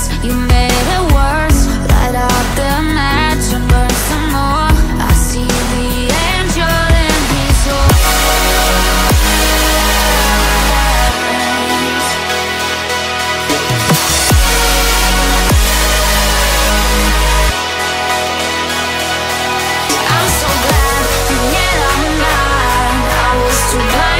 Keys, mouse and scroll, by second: 0.4 shift+click, 1.7 shift+click, 2.4 middle click, 3.2 scroll up 2, 5.0 shift+click, 5.6 shift+click, 6.3 middle click, 6.8 scroll down 2, 8.3 shift+click, 9.0 shift+click, 9.5 shift+double click, 10.0 shift+double click, 10.7 shift+click, 11.4 shift+middle click, 13.3 shift+click, 14.0 shift+click, 14.6 shift+click, 15.2 shift+click, 15.7 shift+click, 17.8 shift+click, 20.8 shift+middle click, 22.4 middle click.